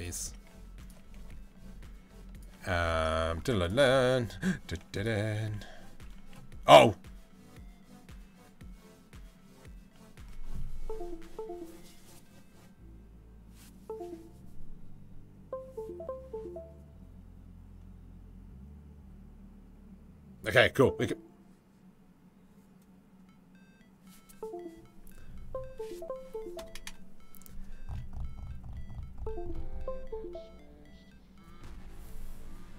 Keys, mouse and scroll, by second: 0.8 g.